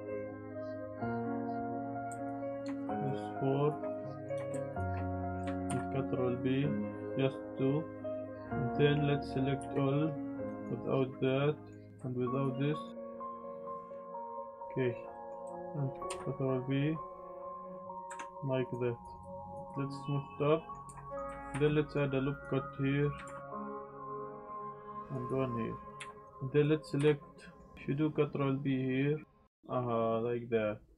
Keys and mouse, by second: 0.7 s, 2.0 2, 2.2 alt+click, 3.0 alt+shift+click, 3.6 alt+shift+click, 3.9 middle click, 5.0 click, 5.7 ctrl+b, 8.4 click, 9.6 a, 10.4 z, 10.6 ctrl+click, 11.2 middle click, 11.9 ctrl+b, 11.9 z, 12.3 ctrl+click, 12.7 click, 13.1 click, 13.2 ctrl+click, 13.4 click, 13.5 click, 13.6 ctrl+click, 13.9 ctrl+click, 14.0 ctrl+click, 14.2 middle click, 14.3 shift+click, 14.4 middle click, 14.6 middle click, 15.1 middle click, 15.9 Tab, 15.9 ctrl+z, 16.1 ctrl+b, 17.9 click, 18.1 Tab, 19.7-20.7 drag, 21.0 click, 21.5 ctrl+r, 22.3 click, 22.7 click, 23.2 ctrl+r, 23.5 click, 23.8 click, 24.4 click, 24.9 ctrl+r, 25.2 click, 25.9 z, 26.0 1, 26.2 click, 26.9 z, 27.2 click, 27.7 ctrl+b.